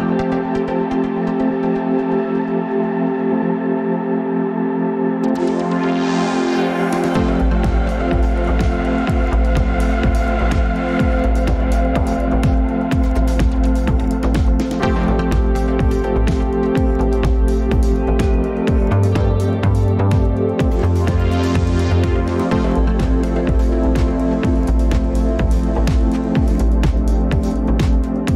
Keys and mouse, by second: 9.6 g, 11.9 s, 17.1-17.5 drag, 25.2 click, 25.9 s.